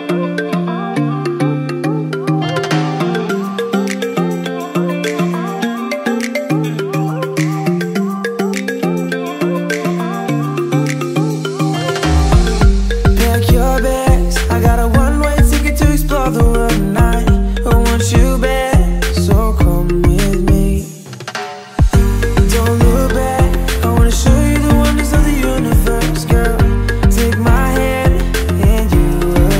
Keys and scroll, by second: 0.8 Return, 1.8 ctrl+j, 4.1 ctrl+c, 4.3 space, 4.7 ctrl+a, 4.9 ctrl+v, 5.3 ctrl+a, 6.0 ctrl+t, 15.7 ctrl+t, 17.3 Return, 22.7 Return.